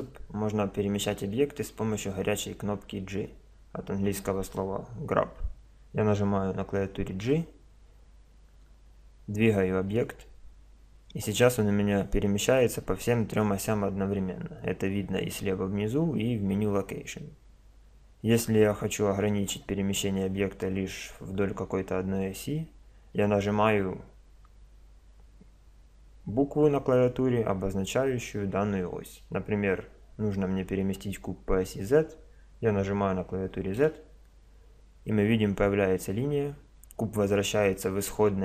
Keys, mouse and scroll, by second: 7.2 g.